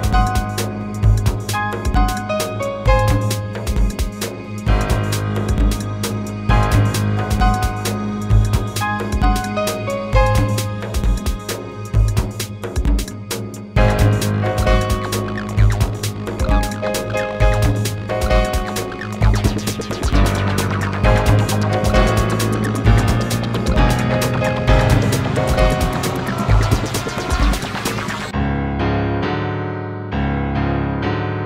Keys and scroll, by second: 22.8 space.